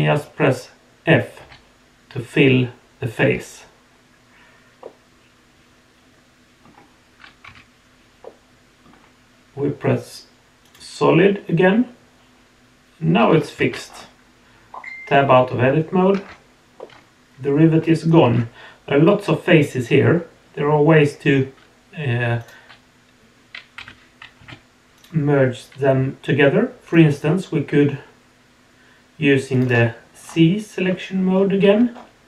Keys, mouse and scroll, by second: 4.8-6.6 middle drag, 7.4 z, 8.2 middle click, 10.6 click, 13.6 alt+a, 13.9-16.1 scroll down 1, 16.1 Tab, 16.8-17.1 middle drag, 17.4 middle click, 17.6 middle drag, 18.3 Tab, 22.4 click, 23.8 3, 30.2-30.8 scroll up 3, 31.3 scroll down 1, 31.9-32.2 scroll down 2.